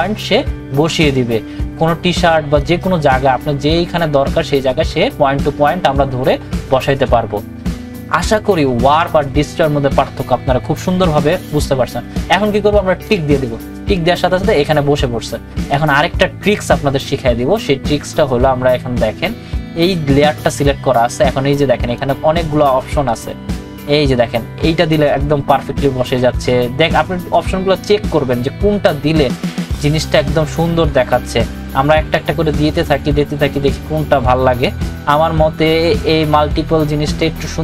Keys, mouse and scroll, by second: 2.6 click, 2.6-13.1 drag, 20.5 click.